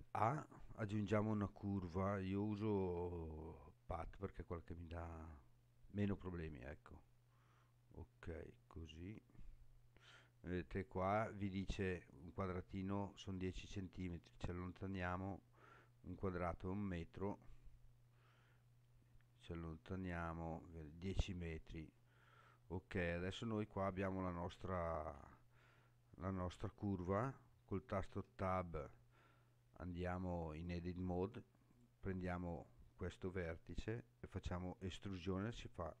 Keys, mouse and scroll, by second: 8.6 scroll up 3, 9.3 scroll up 2, 9.9 scroll down 3, 13.7-16.7 scroll down 3, 17.7-20.0 scroll down 6, 20.0 scroll down 2, 21.9-23.5 scroll up 8, 24.1-24.7 scroll down 4, 28.0 Tab, 31.7 click, 33.4-34.1 scroll down 5.